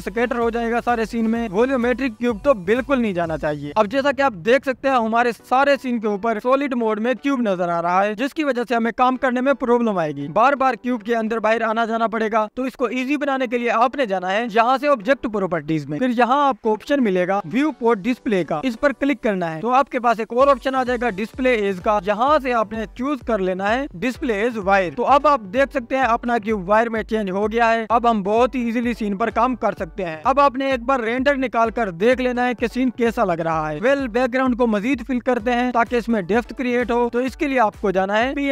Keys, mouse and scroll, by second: 3.5-4.3 drag, 4.3 scroll down 6, 4.3-5.4 drag, 6.8 click, 23.9-25.3 drag, 25.3-25.7 scroll down 2, 25.7-26.5 scroll up 10, 26.5-28.1 scroll down 11, 28.1-29.7 scroll up 10, 29.7 click, 32.3-38.5 drag.